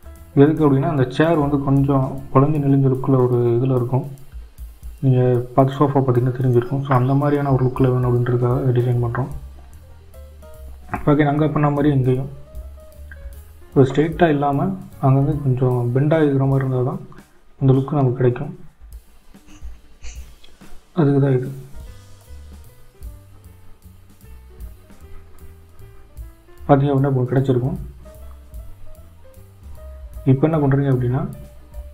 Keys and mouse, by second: 1.5 shift+click, 2.9 shift+click, 6.5-7.9 middle drag, 8.7 g, 14.4 click, 14.8-19.8 middle drag.